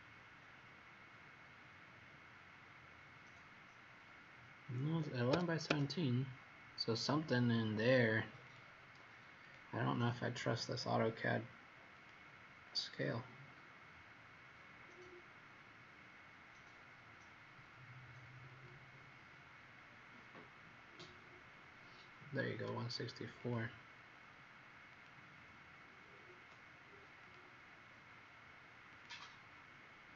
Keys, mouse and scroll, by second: 5.6 Escape, 9.4 click, 10.0 click, 11.9 click, 14.5-15.9 scroll down 17, 18.4 click.